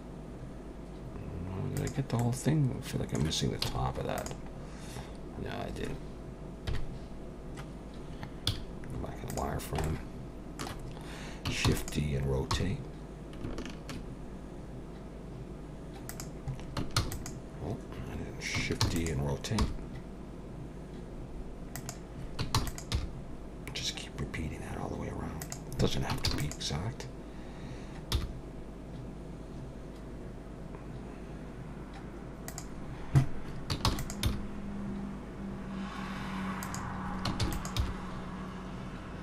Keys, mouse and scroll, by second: 2.2 middle click, 3.6 z, 4.6-5.1 scroll up 4, 5.1-6.6 scroll down 3, 6.7 KP_1, 7.3-7.7 scroll down 2, 8.5 z, 9.8 shift+middle click, 11.8 shift+d, 12.5 r, 17.0 shift+s, 18.8 shift+d, 19.6 r, 22.6 shift+d, 22.9 r, 26.3 shift+d, 28.1 r, 33.9 shift+d, 34.2 r, 37.4 shift+d, 37.8 r.